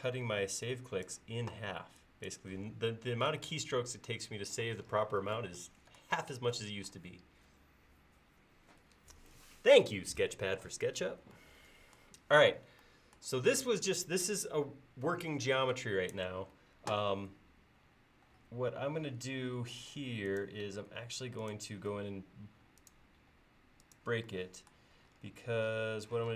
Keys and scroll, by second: 26.2 p.